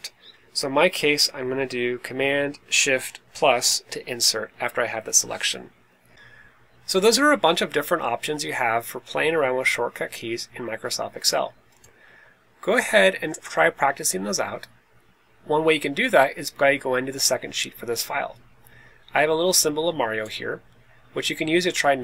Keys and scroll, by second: 6.1 Left, 6.1 Down, 6.1 Up.